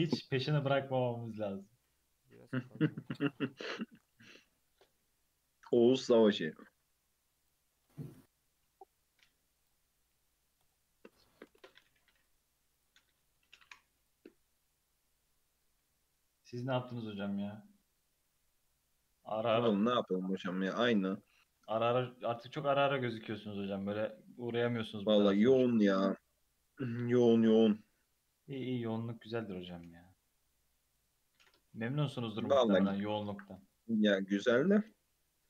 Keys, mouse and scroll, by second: 0.4-2.3 middle drag, 2.3 KP_3, 2.4-3.4 scroll up 6, 3.4 click, 4.1 Tab, 4.4 2, 5.1 a, 6.1 shift+e, 8.0 shift+e, 10.6-12.3 drag, 12.3 Tab, 12.7 click, 13.0-13.4 scroll down 3, 13.4-14.0 shift+middle drag, 14.0 click, 14.2 Tab, 14.7-15.8 scroll up 1, 15.8 alt+z, 16.2-17.5 scroll down 3, 17.5 scroll down 1, 18.4 s, 19.9 g, 21.5 s, 23.1 s, 24.3 s, 26.1-27.6 middle drag, 27.6 s, 29.6 Tab, 29.9 alt+z, 30.1 scroll down 2, 30.4 middle click, 31.1-31.7 scroll up 2, 31.7-32.0 scroll up 1, 32.0 KP_3, 32.2 scroll down 1, 32.2 scroll up 2, 33.2-33.5 shift+middle drag, 33.5 ctrl+r.